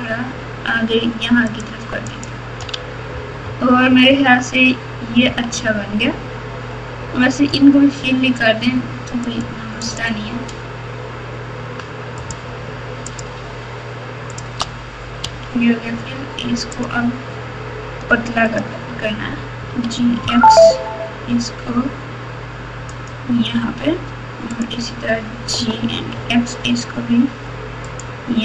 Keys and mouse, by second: 2.1 click, 2.7 alt+z, 3.4-4.2 typing, 5.2 KP_6, 9.2 click, 9.8 click, 12.2 shift+click, 13.1-14.5 shift+drag, 15.2 f, 16.7 click, 18.5 click, 19.6 g, 24.5 click, 25.5 g.